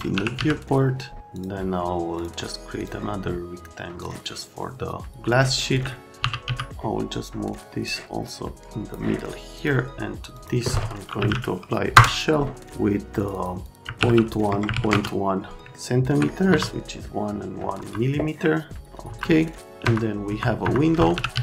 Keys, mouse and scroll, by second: 0.1 f, 1.3 click, 2.2 click, 2.8 click, 4.0 click, 6.5 z, 8.5 click, 9.6 click, 10.3 click, 10.9-11.8 typing, 11.9 Return, 13.2 click, 13.3 click, 13.6 click, 13.8 KP_Decimal, 14.0 KP_1, 14.5 Tab, 14.7 KP_1, 14.7 KP_Decimal, 14.9 KP_Enter, 15.7 alt+middle click, 16.5 F3, 16.8 middle click, 17.7 F3, 19.1 F3, 19.4 right click, 19.8 F3, 20.3 F3, 20.6 F3, 20.9-21.4 typing.